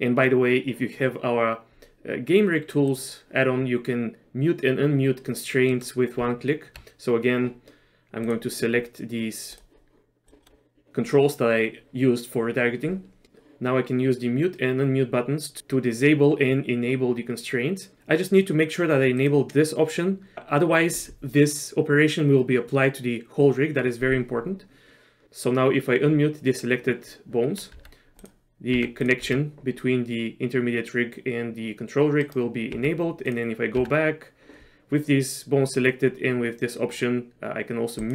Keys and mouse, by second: 5.7 middle click, 6.3 Tab, 8.3 click, 9.6 click, 10.4 middle click, 19.2 click, 27.8 Tab, 28.3 click, 28.8 Tab, 29.3 r, 32.8 Tab, 33.8 Tab, 38.0 click.